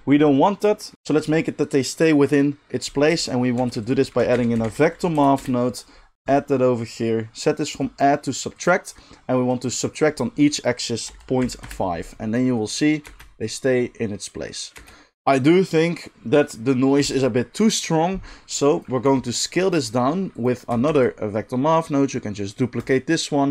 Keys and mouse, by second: 3.5 shift+a, 6.3-7.6 middle drag, 7.6-19.4 drag, 13.0 space, 14.8 space, 19.0 g, 19.4 middle click, 19.6 click, 20.4-23.5 shift+middle drag, 20.9 shift+d.